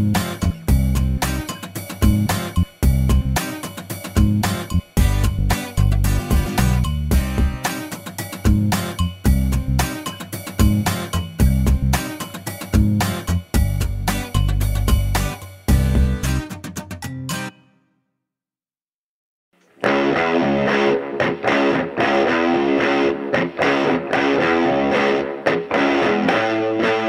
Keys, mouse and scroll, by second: 1.0 middle click, 1.6-2.1 scroll up 1, 2.1 middle click, 4.2 click, 5.2 click, 6.6 shift+o, 8.4 middle click, 9.1-9.5 scroll up 1, 12.0 click, 13.4 click, 14.4 shift+o, 15.3-16.1 shift+scroll down 2, 16.1-17.8 drag, 17.8 scroll up 1, 18.1-19.6 drag, 20.7 middle click, 22.8 click, 24.6 click.